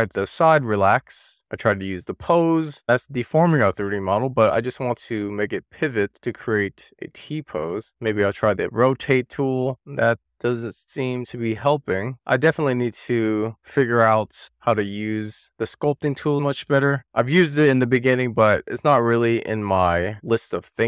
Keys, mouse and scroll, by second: 0.0 middle click, 0.2 scroll up 3, 0.4 click, 0.8 super+z, 0.8 middle click, 1.0 scroll down 2, 1.1 scroll up 1, 1.3 click, 1.7 click, 2.1 super+z, 2.3 scroll down 1, 2.5 middle click, 3.0 click, 3.5 super+z, 4.2 click, 4.6 middle click, 4.8 super+z, 5.4 super+z, 5.7-6.8 scroll up 1, 7.2 click, 7.5 super+z, 7.8 click, 8.9 click, 11.1 super+z, 11.8 click, 13.0 super+z.